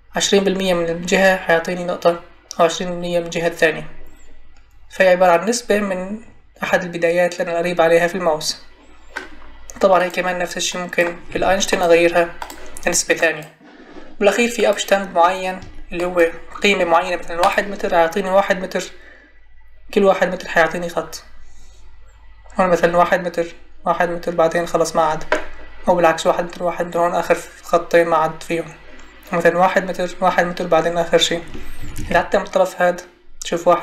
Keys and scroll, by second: 11.3 Escape, 15.6 Escape, 31.8 Escape.